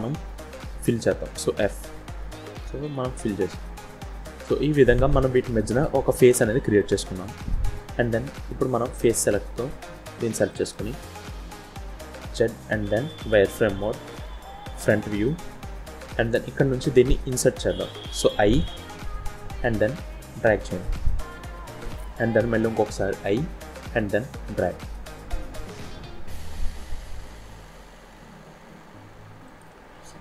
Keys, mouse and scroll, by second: 1.5 f, 2.7 click, 6.7 middle click, 9.2 click, 9.9 click, 10.4 middle click, 12.0 z, 14.7 KP_1, 15.5-15.9 scroll up 4, 16.2 shift+middle click, 17.4-17.8 scroll down 1, 19.0 i, 29.9-30.2 scroll down 2.